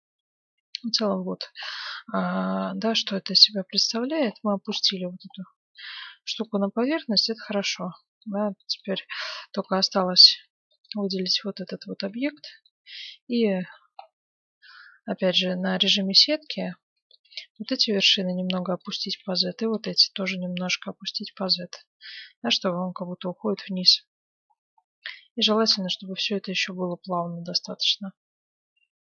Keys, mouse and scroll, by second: 1.8-8.2 middle drag, 8.6-10.9 middle drag, 9.4 Tab, 10.3 Tab, 10.7-11.8 right drag, 11.2 middle click, 11.8 Tab, 12.4-14.7 middle drag, 14.5-17.5 typing, 16.5-18.3 right drag, 19.0 a, 19.1 b, 19.7 g, 21.3 Tab, 21.8 middle click, 22.1 z, 23.7 a, 25.4-29.0 middle drag.